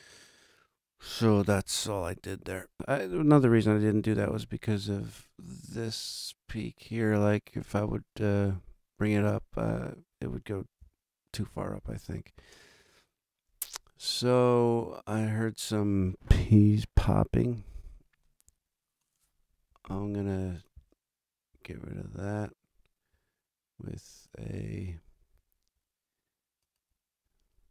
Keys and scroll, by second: 1.4 super+=, 4.0 super+=, 11.4 super+=.